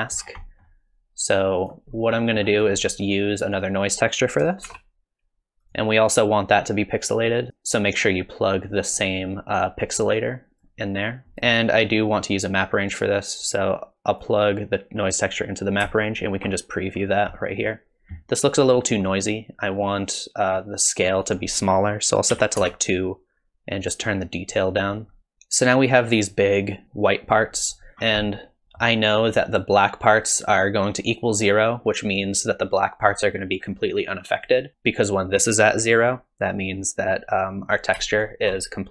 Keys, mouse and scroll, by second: 0.4 middle click, 1.3 click, 2.1 middle click, 2.6-3.3 scroll up 1, 3.3 scroll up 3, 3.6 click, 4.7 shift+d, 7.1 click, 11.3 middle click, 11.3 click, 11.3 scroll up 3, 12.1 click, 13.7 click, 16.1 ctrl+shift+click, 17.0-17.7 scroll up 4, 17.4 middle click, 21.3 click, 24.1 click, 25.3 click, 28.0-28.6 scroll down 6, 28.2 middle click, 28.6 middle click, 34.4 click, 34.7 middle click, 34.7-36.5 scroll up 7, 38.2 ctrl+shift+click.